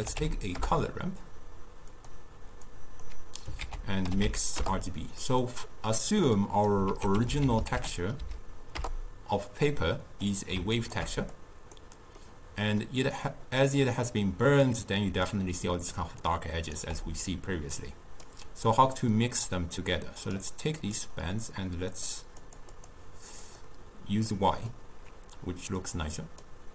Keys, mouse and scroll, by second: 2.7-3.7 drag, 3.7 ctrl+a, 6.4 click, 6.9 ctrl+a, 11.4 click, 12.3-15.2 middle drag, 15.2-16.9 typing, 15.3 click, 16.3 right click, 17.8-22.1 drag, 22.5 click, 22.8-24.4 drag, 24.4-25.9 middle drag, 25.9-26.7 drag.